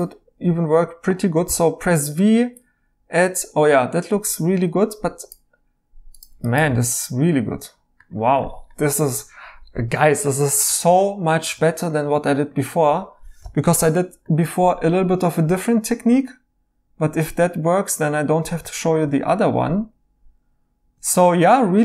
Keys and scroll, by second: 1.4 v, 6.7 e, 10.6 e, 11.7 e, 19.3 e, 21.1 e.